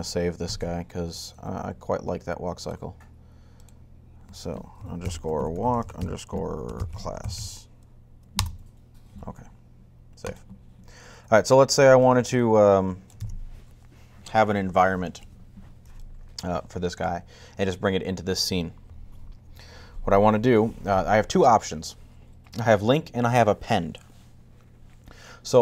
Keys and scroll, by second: 0.3 shift+super+s, 4.6-7.7 typing.